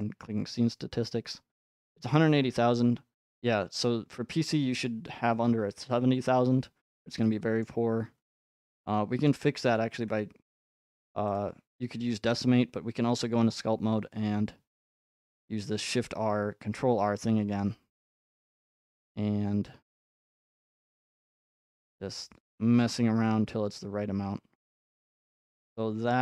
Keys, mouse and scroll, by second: 0.0 click, 0.0 right click, 6.1-6.7 scroll up 4, 6.7-7.3 scroll down 7, 7.6 middle click, 7.8 middle click, 7.8 middle click, 7.9 middle click, 9.3 middle click, 9.8 ctrl+Tab, 11.4 click, 12.0 ctrl+Tab, 15.8 r, 21.1-23.2 drag, 26.0 shift+middle click.